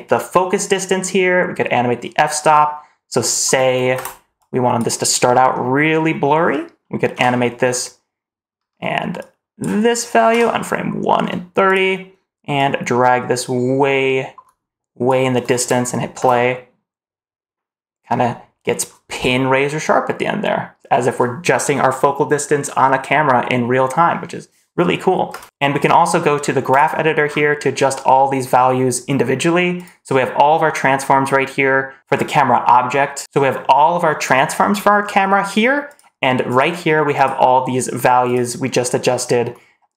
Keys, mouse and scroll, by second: 3.8 space, 4.3 click, 7.0 i, 8.5 o, 9.1 click, 10.2 i, 11.5 click, 12.4-14.9 drag, 16.0 space, 18.0 scroll up 1, 25.2 space, 25.6-26.8 drag, 27.1 scroll down 2, 27.8 middle click, 28.3-28.8 scroll down 1, 29.6 click, 30.2-31.2 scroll down 1, 32.0 scroll up 1, 33.2 click, 34.1 click, 34.5-34.9 scroll down 2, 34.9-35.7 scroll up 2, 35.7 click, 36.4 click, 37.0 click, 38.1 click.